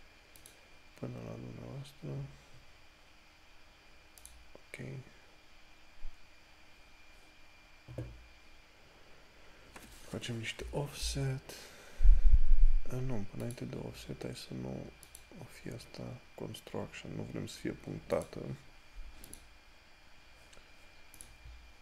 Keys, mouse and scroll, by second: 0.7 click, 4.6 click, 11.0 click, 18.5 click.